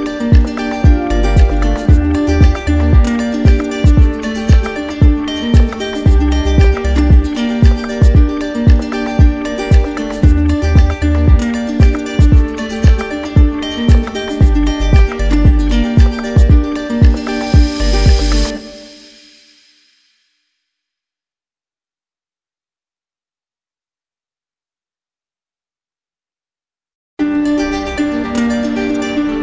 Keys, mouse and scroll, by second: 0.2 click, 1.9 click, 2.8 click, 3.2 shift+click, 3.4 shift+click, 4.3 w, 7.1 click, 9.2 click, 10.1 click, 10.6 click, 11.1 shift+click, 11.6 shift+click, 13.6 click, 14.3 click, 15.2 click, 15.9 click, 16.5 alt+click, 16.8 alt+click, 17.1 click, 22.9 click, 24.6 click, 25.5 click, 28.1 q, 29.1 right click.